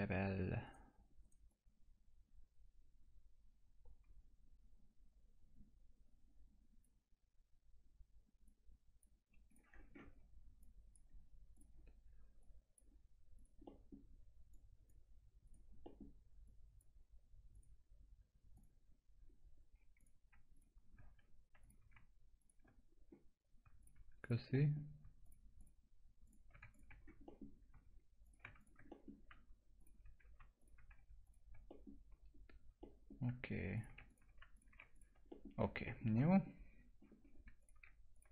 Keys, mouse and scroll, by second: 0.6 right click, 1.5-8.4 drag, 9.7 scroll up 1, 10.0 1, 10.6 click, 13.6 middle click, 14.5 click, 15.8 middle click, 16.4 click, 19.1 scroll down 1, 19.9 click, 20.5 shift+click, 22.8-23.4 scroll up 1, 23.8 ctrl+click, 24.5 middle click, 25.2 ctrl+click, 26.9-27.2 scroll down 1, 27.2 middle click, 28.2 ctrl+click, 28.9 middle click, 29.8 ctrl+click, 30.6 ctrl+click, 31.7 middle click, 31.9 scroll down 1, 32.8 middle click, 33.7 ctrl+click, 35.3 middle click, 35.8 middle click, 36.0 scroll down 1, 36.3 alt+middle click, 37.2 scroll up 1, 37.6 ctrl+click.